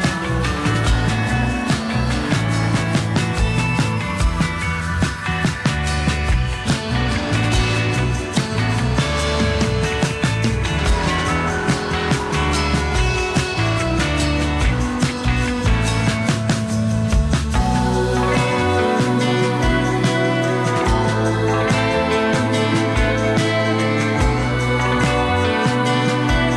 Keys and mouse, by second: 0.2 click, 0.8 click, 1.4 click, 2.0 click, 2.6 click, 3.3 f, 3.4 click, 3.8 click, 4.0 click, 5.1 x, 5.5 click, 6.3 e, 7.4 e, 9.1-12.3 typing, 12.5 click, 13.6 click, 13.8 ctrl+z, 15.5 ctrl+1, 16.1 ctrl+click, 16.4 g, 16.5 click, 17.3 g, 18.4 g, 19.2 e, 21.2 e, 21.9 l, 22.4 shift+middle click, 22.7 click, 23.6 s, 25.2 click, 25.7 g, 26.1 click.